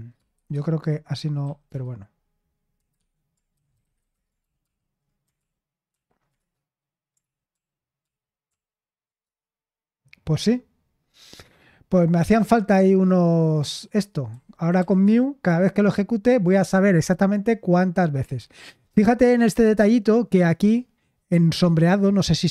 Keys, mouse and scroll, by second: 0.3-2.1 typing, 2.7 Delete, 2.9 Escape, 3.2-4.5 typing, 4.6 ctrl+p, 5.4 ctrl+p, 5.9 ctrl+p, 6.4 Return, 7.2 ctrl+p, 7.5 ctrl+p, 8.0 ctrl+p, 8.5 ctrl+p, 9.2 Return, 14.3-14.7 typing, 15.0 Return.